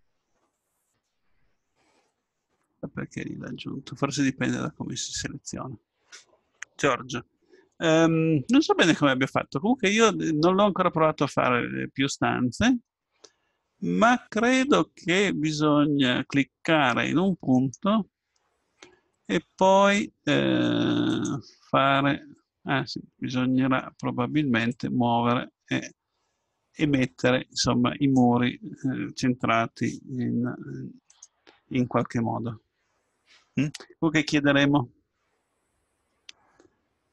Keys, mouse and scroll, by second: 2.9-4.1 middle drag, 17.5-19.4 right drag, 21.1-26.6 drag, 30.1 r.